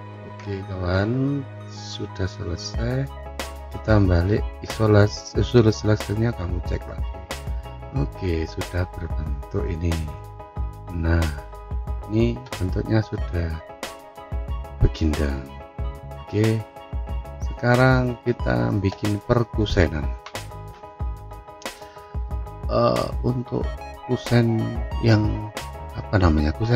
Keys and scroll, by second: 0.3 Return.